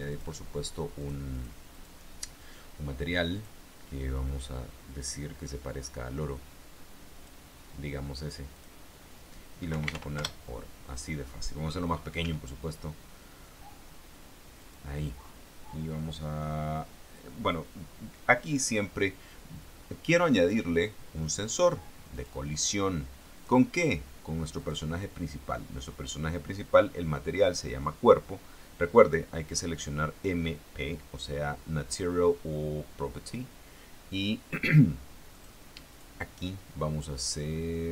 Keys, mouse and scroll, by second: 0.3 click, 1.2 click, 1.5 click, 1.9 click, 3.5 click, 4.3-7.6 drag, 8.7 click, 9.9 o, 10.0 r, 10.1 o, 10.9 Return, 12.4 s, 14.8 click, 20.6 click, 22.3 click, 23.5 click, 24.7 click, 27.6 click, 35.5 click, 36.1 click.